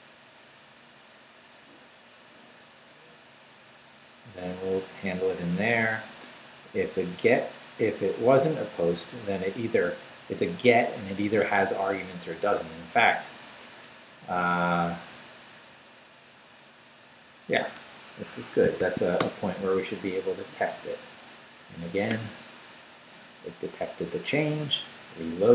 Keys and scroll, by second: 0.6 Up, 1.5 Down, 3.5 Up, 4.1 Down, 6.6 Up, 8.8 Down, 11.5 Up, 14.8 Down, 16.0 Down, 18.2 Escape, 18.8 shift+;, 19.0 shift+w, 19.2 Return.